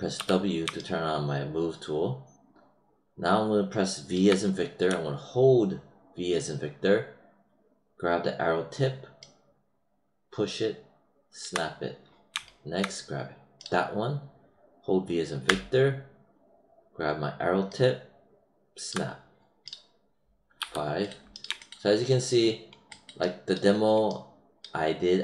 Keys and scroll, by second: 0.1 w, 4.8 v, 15.4 v.